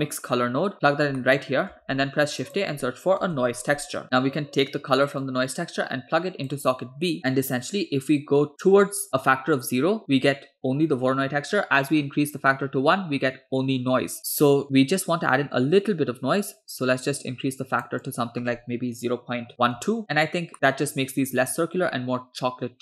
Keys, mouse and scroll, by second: 1.2 middle click, 1.8 shift+a, 5.3 drag, 6.7 drag, 7.2-18.0 drag, 18.1-19.9 drag, 20.5 middle click, 20.5-20.8 scroll up 2, 21.9 scroll down 2, 22.2 middle click.